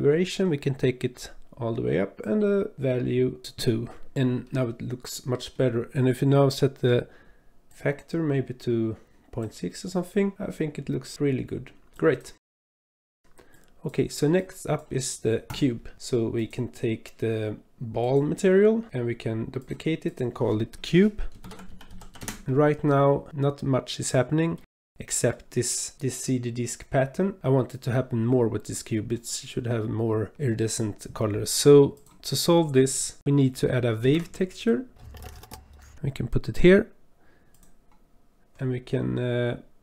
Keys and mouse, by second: 2.2 click, 5.1 click, 7.7-9.4 drag, 11.0 drag, 11.5-12.7 drag, 13.1 click, 13.5 click, 14.4 click, 15.5 click, 16.5-18.3 drag, 19.6 click, 20.1-22.2 drag, 23.1-24.7 middle drag, 25.3-26.0 middle drag, 29.3-30.3 middle drag, 30.4 middle click, 31.1 click, 31.7 click, 32.4 click, 33.2 Delete, 34.0 shift+a.